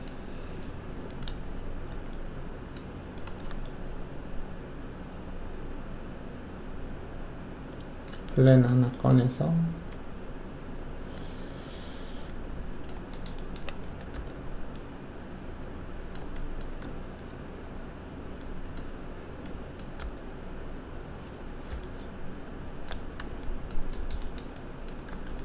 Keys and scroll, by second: 1.4 alt+shift+q, 14.1 alt+r, 16.8 alt+w, 20.0 e, 21.6 j, 22.2 j, 23.2 typing, 25.1 alt+w.